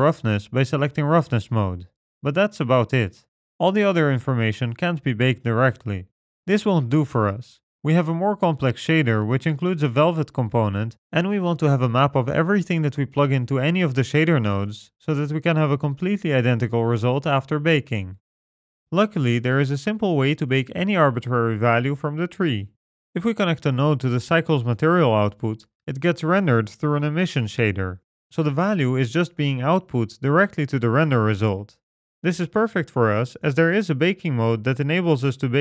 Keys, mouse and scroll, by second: 5.1-6.7 scroll down 13, 6.1 middle click, 6.9-8.3 scroll down 5, 7.5 middle click, 8.4-8.9 scroll down 2, 9.0 middle click, 9.4-10.1 scroll up 7, 10.1 middle click, 10.4-12.0 scroll up 5, 14.1-15.8 scroll down 4, 15.8 middle click, 20.5-21.5 scroll up 8, 21.5 middle click, 23.0 click, 26.6 click, 28.7-29.4 scroll down 2, 30.7 click.